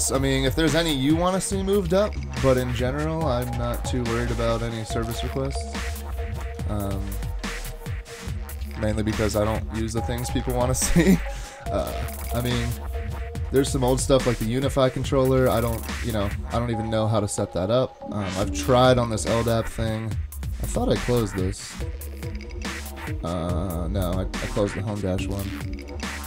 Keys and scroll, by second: 6.4 ctrl+Tab.